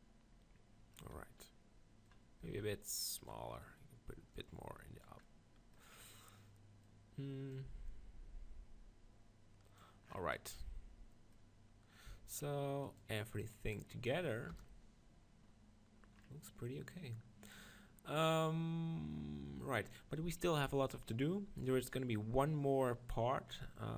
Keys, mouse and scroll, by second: 2.4 s, 4.4-6.0 drag, 6.0-7.5 middle drag, 7.5-9.8 drag, 10.1-12.8 middle drag, 12.8-14.5 shift+drag, 14.5 KP_0, 14.6 click, 14.7 click, 15.5-22.0 middle drag.